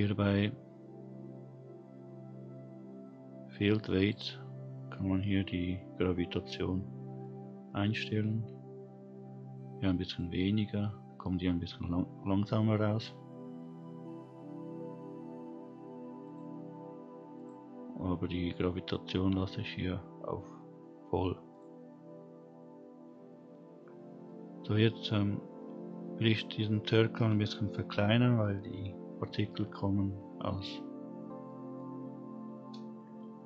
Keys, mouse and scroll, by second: 3.9 click, 4.9-6.3 scroll down 3, 7.2-8.0 drag, 10.0 click, 11.9 scroll down 1, 13.5-14.9 scroll up 1, 16.2 click, 17.3 click, 18.5-18.9 drag, 21.5 click, 24.2-25.0 middle drag, 25.4-26.2 scroll up 1, 26.2-27.3 scroll up 1, 31.2 scroll up 1, 31.4 middle drag, 33.0 space.